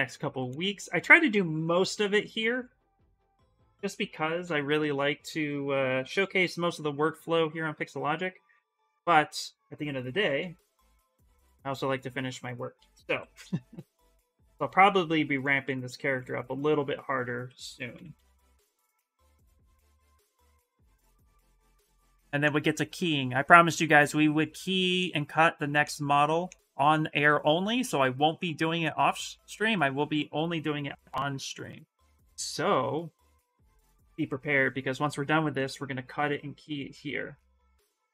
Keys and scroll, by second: 0.0-0.1 typing, 2.9 b, 3.3 c, 4.2 l, 6.4 s, 9.6-11.1 typing, 12.5 ctrl+z, 12.8 x, 16.7-18.6 typing, 33.6-35.2 typing.